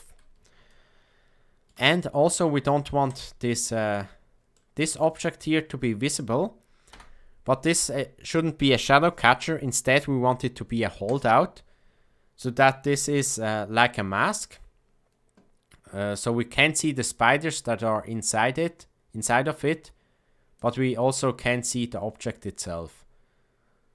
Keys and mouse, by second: 0.7-1.7 shift+middle drag, 3.0 click, 4.5 middle click, 6.9 KP_0, 11.0 click, 12.8 a, 13.0 a, 20.5 click.